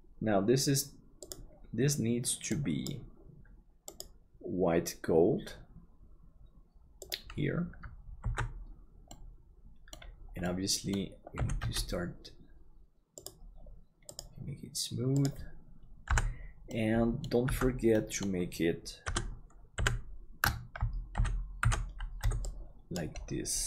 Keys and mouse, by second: 8.4 ctrl+s, 9.1 middle click, 10.4 middle click, 14.5 click, 16.1 KP_Decimal, 17.0 middle click, 17.5 Tab, 17.9-19.0 middle drag, 19.0 KP_Divide, 19.8 KP_3, 21.1 alt+z, 21.6 alt+a, 22.2 b.